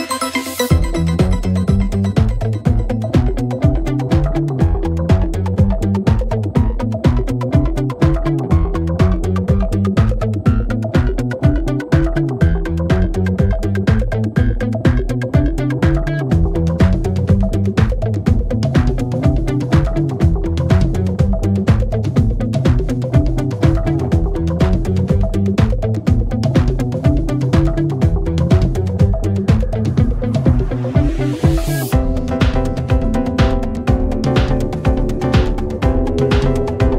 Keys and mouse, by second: 6.6 middle click, 11.6 middle click, 11.9 middle click, 12.7 middle click, 13.4 middle click, 20.6 middle click, 20.8 middle click, 22.1 middle click, 22.4 middle click, 23.4 middle click, 26.9 middle click, 27.4 middle click, 27.7 middle click, 28.5 middle click, 29.9 middle click.